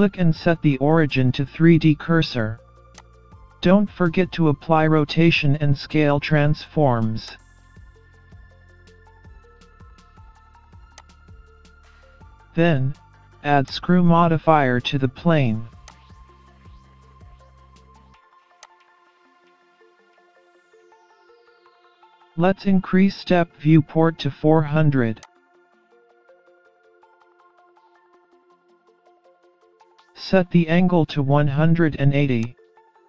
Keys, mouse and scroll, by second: 7.3 click, 13.7 click, 15.9 click, 20.0 scroll down 4, 20.4-21.3 scroll up 4, 21.3 middle click, 25.2 click, 29.0 KP_0, 32.4 click.